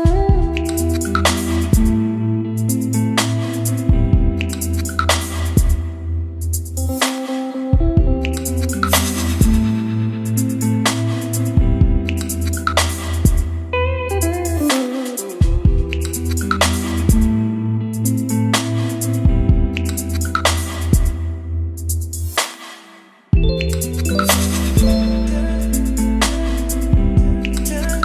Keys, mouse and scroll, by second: 1.3 Return, 1.7-4.5 typing, 5.9 q, 6.8 Return, 7.1 q, 7.7 Return, 10.4-12.1 typing, 12.3 Return, 13.5-15.5 middle drag, 15.5 click, 16.3 ctrl+s, 17.3-28.0 drag.